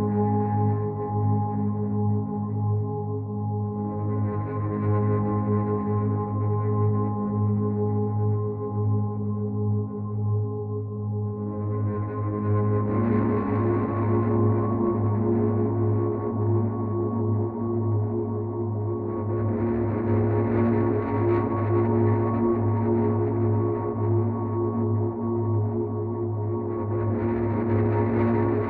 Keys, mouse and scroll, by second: 1.3 Right, 2.1 click, 3.7 Right, 6.3 click, 8.1 Left, 9.1 Right, 9.5 click, 10.1 Left, 10.9 click, 19.9 click.